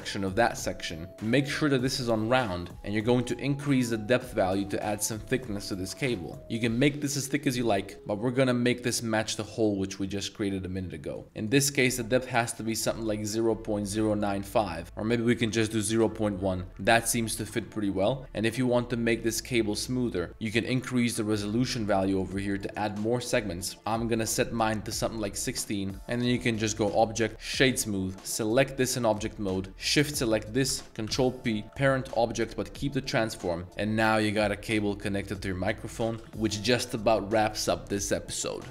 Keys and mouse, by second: 1.4 click, 3.4-7.7 drag, 8.2-11.2 drag, 11.4-14.1 drag, 14.8-15.9 drag, 17.4 shift+click, 17.5-18.1 middle drag, 21.4 click, 21.8 click, 22.1 click, 22.5 click, 23.6 click, 27.3-27.7 drag, 29.3 g, 30.0 shift+click, 31.3 ctrl+p, 33.6 g, 33.9 g, 35.4-36.0 drag, 36.2-38.7 drag, 36.2 a.